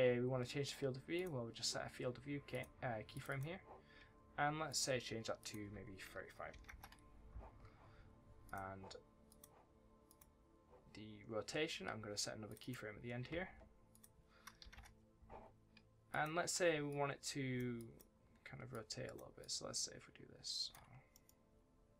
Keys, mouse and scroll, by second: 0.2-1.1 scroll up 1, 1.1 click, 3.2 double click, 4.6 click, 6.4 KP_3, 6.6 KP_Enter, 8.4 click, 10.9-11.5 scroll down 1, 11.5-12.4 scroll up 1, 12.4 click, 12.5 double click, 13.8 click, 14.6 KP_5, 14.7 KP_Enter, 16.0 click, 18.6 shift+click, 21.1 middle click.